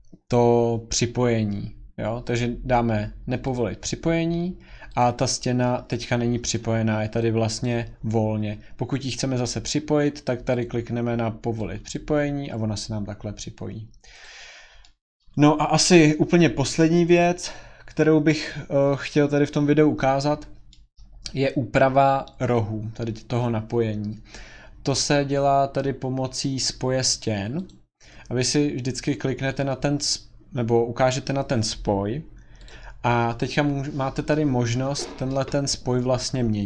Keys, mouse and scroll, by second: 3.5 click, 5.0 click, 6.2 Escape, 6.5 click, 7.6 click, 10.6 click, 11.9 click, 14.2 click, 14.5-15.3 scroll, 20.9 middle click, 27.7 click, 28.9 middle click, 28.9 middle click, 29.0 middle click, 32.7 click, 33.0 scroll.